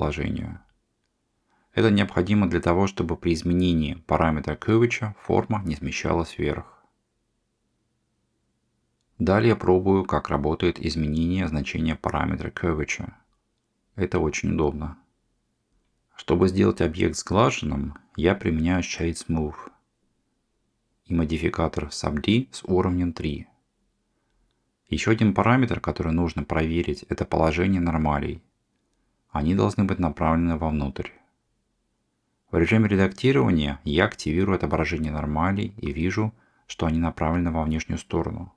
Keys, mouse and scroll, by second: 9.9 Tab, 11.6-15.9 drag, 19.0-20.6 right drag, 22.2 click, 22.9-24.2 drag, 25.5 click, 28.0-29.0 middle drag, 33.2 Tab, 35.7-38.1 drag, 38.3-38.5 middle drag.